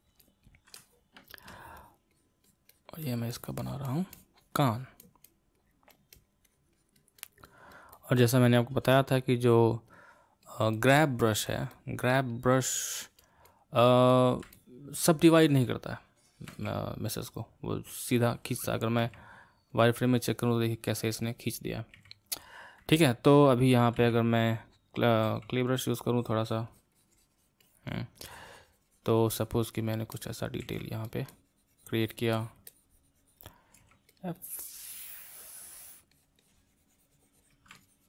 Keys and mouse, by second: 0.7-1.8 middle drag, 1.8-14.5 drag, 14.5-17.6 middle drag, 19.0 q, 21.9 q, 23.0-24.0 middle drag, 24.0 c, 25.2 f, 26.1-30.6 drag, 30.6 f, 31.3-33.8 drag, 33.8 f, 34.4-38.0 drag.